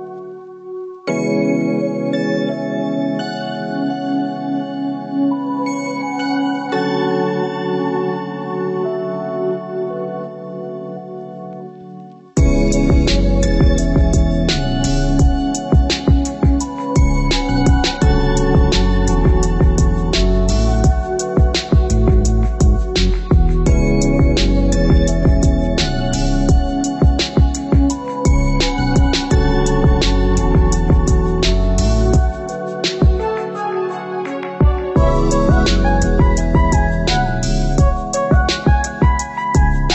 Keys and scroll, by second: 3.6 Down, 7.8 ctrl+-, 8.6 ctrl+0, 13.7 ctrl+c, 14.1 ctrl+v.